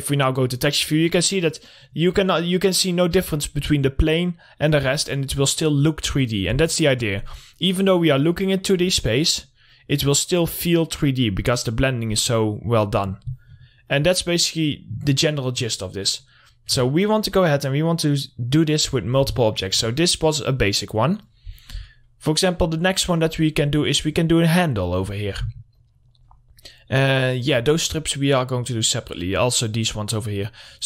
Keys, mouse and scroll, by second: 1.8 scroll up 1, 2.0 middle click, 2.5-4.5 scroll down 1, 4.9 middle click, 5.3 scroll up 1, 7.7-8.3 scroll down 1, 8.3 middle click, 8.5-9.2 scroll down 1, 9.2 scroll up 1, 9.7 middle click, 10.1 click, 10.5-11.3 scroll up 1, 13.6 click, 15.8-16.2 alt+middle drag, 16.2 scroll up 1, 17.7-19.6 drag, 19.6 scroll down 1, 19.8 alt+middle click, 20.7-22.0 drag, 23.2 scroll down 1, 23.7 scroll up 1, 24.3 click, 26.8-27.3 scroll down 1, 27.3 scroll up 1, 29.2 click.